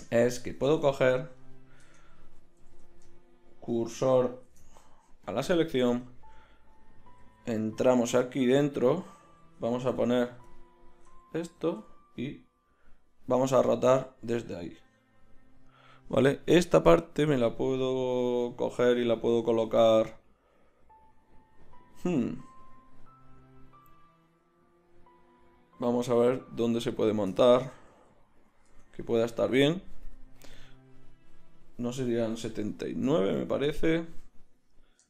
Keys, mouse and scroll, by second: 0.8 Tab, 1.8 Tab, 2.2 a, 2.6 a, 4.4 shift+s, 5.9 Tab, 7.2 z, 10.0 ., 10.9 Tab, 11.4 a, 11.8 a, 13.8 r, 18.0 r, 26.6-30.4 middle drag, 27.9 z, 28.6 Tab, 31.1-32.1 middle drag, 32.2-35.0 middle drag.